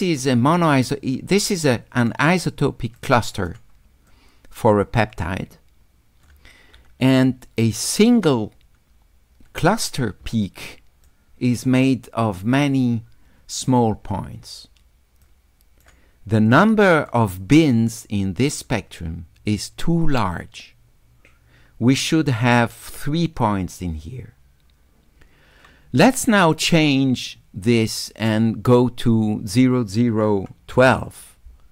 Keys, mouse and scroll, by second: 1.6 click, 3.0 click, 4.1 click, 5.5 click, 10.5 shift+click, 15.2 right click, 16.5 click, 27.8-28.8 drag.